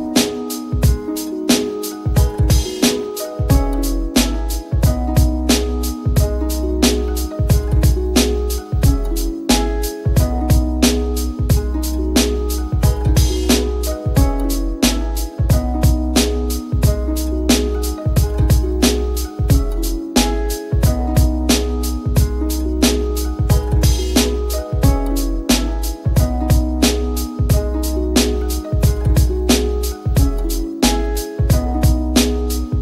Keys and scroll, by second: 25.7 F10, 25.9 F10, 31.1 j.